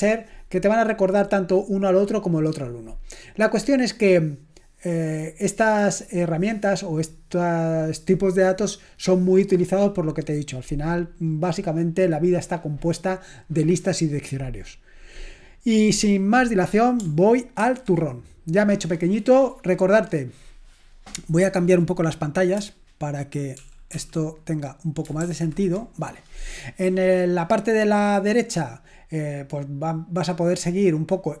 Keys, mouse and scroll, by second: 17.6 ctrl+1, 23.6 super+l, 23.9 super+l, 25.3 shift+super+l.